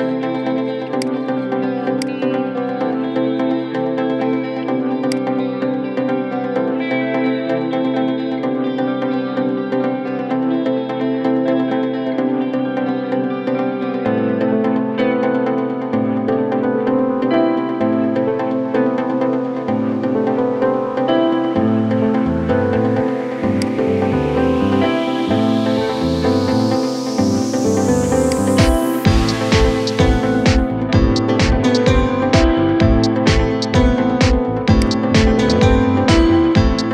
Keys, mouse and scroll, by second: 0.8-1.8 drag, 2.8 n, 4.8-7.8 drag, 25.0-25.3 scroll up 2, 28.0-29.2 drag, 29.2 scroll down 3, 29.8 scroll up 2, 34.6 click.